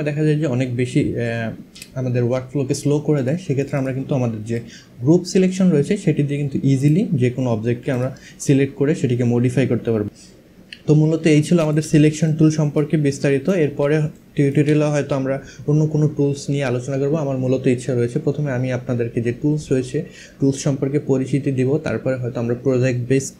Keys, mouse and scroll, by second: 2.8 click, 6.4 click, 7.6 click, 11.2 click, 11.6 space, 11.9 click, 12.7 click, 13.8 click.